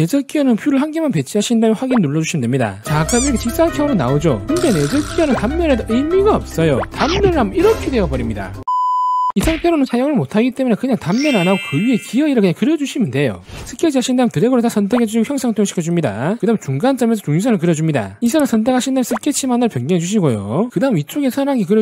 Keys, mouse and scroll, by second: 4.7 click, 5.1 click, 5.4 click, 5.7 click, 6.0 c, 6.3 click, 7.1 click, 7.5 click, 13.9 click, 15.0 click, 15.8 click, 16.2 click, 17.2 click, 18.2 click, 18.4 click, 19.2 click, 21.0 scroll up 2, 21.3 middle click.